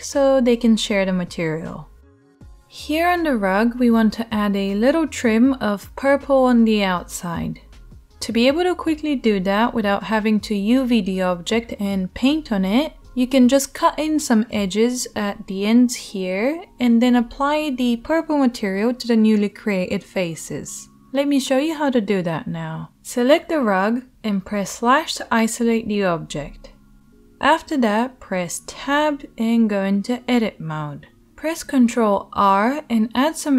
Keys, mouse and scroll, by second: 2.5 Tab, 2.7-33.5 drag, 24.4 /, 26.7 KP_7, 29.6 Tab, 31.8 ctrl+r.